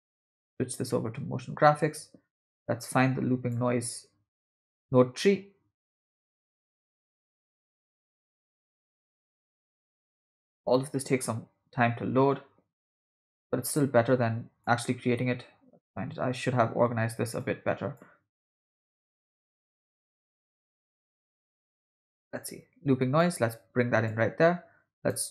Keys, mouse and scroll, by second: 2.9 click, 4.5-10.2 drag, 11.2-13.9 drag, 14.7-16.4 drag, 17.8 click, 18.7-19.0 drag, 19.9-20.6 drag, 21.2-22.5 drag, 23.2 click, 25.0-25.3 right drag.